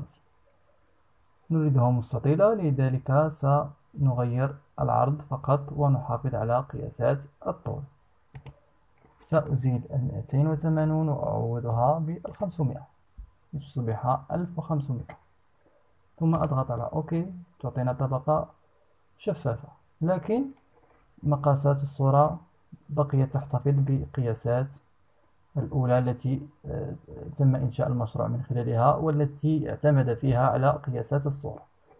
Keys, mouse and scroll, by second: 7.9 click, 9.7 BackSpace, 11.2 KP_5, 11.7 KP_0, 15.9 click.